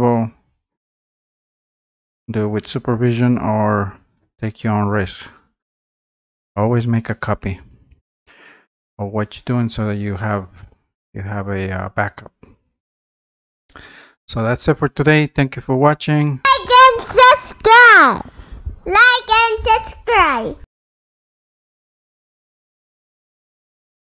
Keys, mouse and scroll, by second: 0.0 scroll up 2, 0.4-0.8 scroll down 2, 1.6 click, 2.0 scroll up 2, 2.3 scroll down 2, 4.2 click, 4.8 scroll up 1, 5.6 scroll down 1.